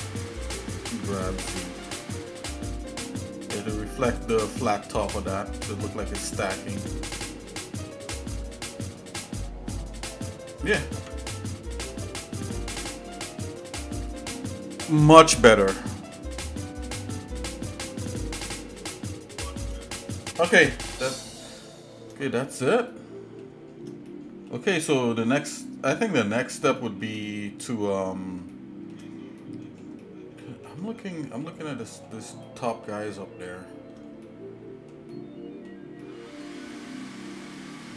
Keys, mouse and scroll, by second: 1.1 g, 5.4 shift+middle click, 6.8-7.9 shift+middle drag, 8.2 middle click, 9.2 shift+middle click, 10.3 shift+middle click, 11.0 Tab, 11.5 shift+middle click, 12.5 scroll down 1, 13.0 shift+middle click, 13.8 middle click, 16.5 shift+middle click, 17.7 shift+middle click, 18.5 middle click, 19.1 shift+middle click, 22.3 shift+middle click, 22.9 shift+middle click, 24.1 middle click, 24.8 shift+middle click, 25.9 middle click, 26.8 shift+middle click, 28.5 shift+middle click, 29.4 middle click, 30.0 shift+middle click, 31.0 middle click, 31.6 shift+middle click, 32.4 middle click, 33.1 shift+middle click, 34.2 shift+middle click, 35.1 shift+middle click, 36.0 shift+middle click, 36.7 shift+middle click, 37.7 shift+middle click.